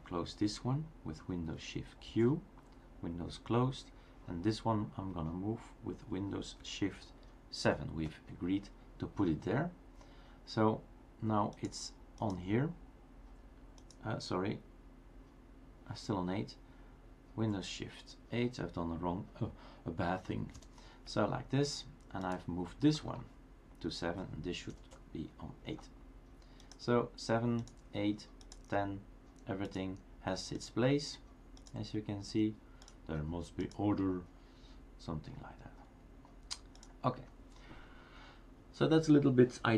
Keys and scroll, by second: 2.1 shift+super+q, 7.7 shift+super+7, 20.7 shift+super+7, 24.7 shift+super+8.